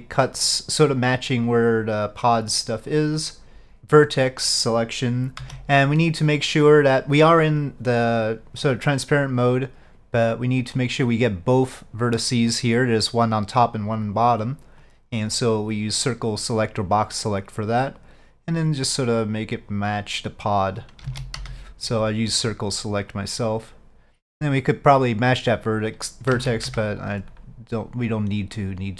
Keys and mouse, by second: 0.4 click, 4.0 Tab, 4.0 click, 4.0 1, 14.9-20.5 drag, 21.1 alt+a, 21.5 c, 23.2-24.5 drag, 26.5 alt+a, 26.7 c, 28.0-28.9 drag.